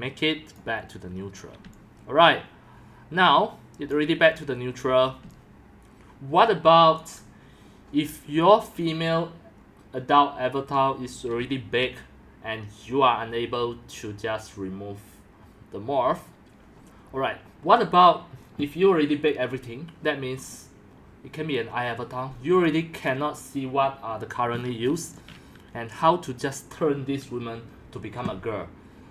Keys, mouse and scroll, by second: 0.5-5.2 drag, 1.7-4.1 typing, 5.2-29.1 typing, 6.9 click, 7.6-11.2 drag, 11.6-12.1 drag, 16.6 click, 16.8-21.9 drag, 23.1 click, 23.7-24.5 drag, 24.5 middle click, 24.5-24.9 scroll up 6, 24.9-25.3 scroll down 3, 26.0-28.1 drag.